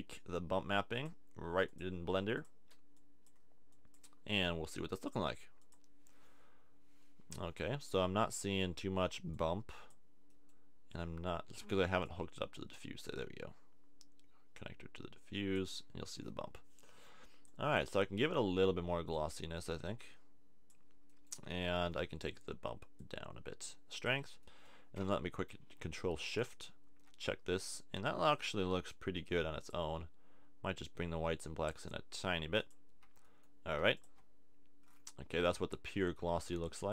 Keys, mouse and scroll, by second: 3.0 click, 23.0-24.0 drag.